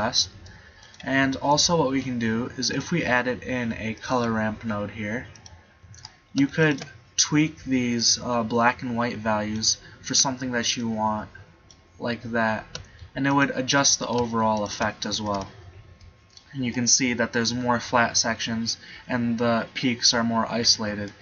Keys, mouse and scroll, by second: 2.2 shift+a, 6.1-7.4 drag, 10.1 middle click, 13.0 middle click, 15.2 Tab, 15.4 Tab, 21.1 middle click.